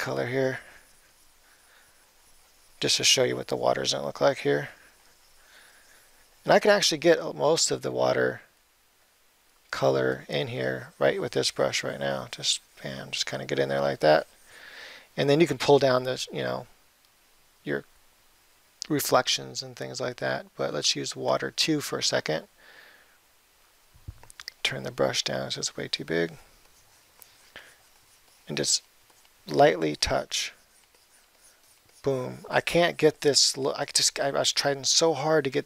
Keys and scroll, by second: 24.9 [.